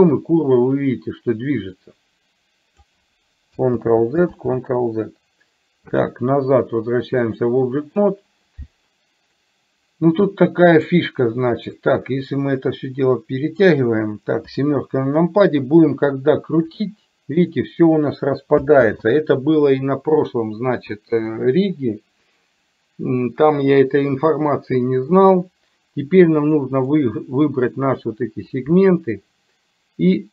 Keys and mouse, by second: 3.9 ctrl+z, 7.2-8.2 drag, 9.4-11.0 middle drag, 12.0-13.7 drag, 16.9 r, 19.0 ctrl+z, 26.9 click.